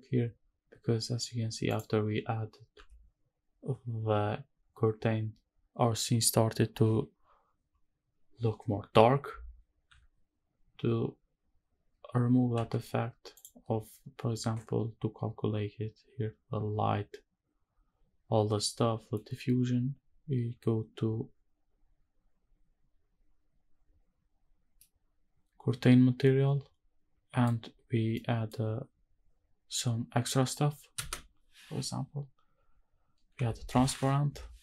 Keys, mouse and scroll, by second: 1.7 click, 2.7 h, 12.6 h, 13.3 click, 20.9-23.1 scroll down 1, 23.1 scroll down 2, 24.7-27.5 middle drag, 28.1 middle click, 31.0 space.